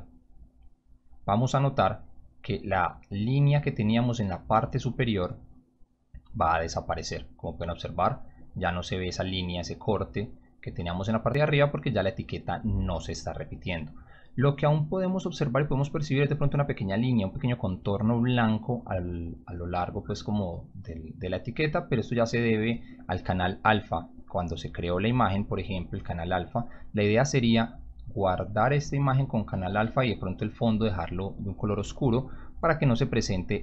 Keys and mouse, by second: 5.3 g, 21.6 click, 24.7 click, 33.5 click.